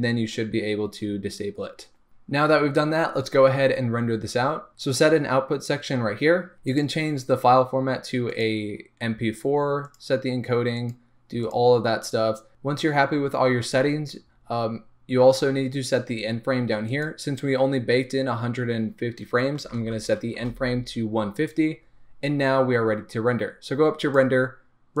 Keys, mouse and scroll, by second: 6.5 Return, 6.5-25.0 drag, 9.4-10.0 scroll down 2.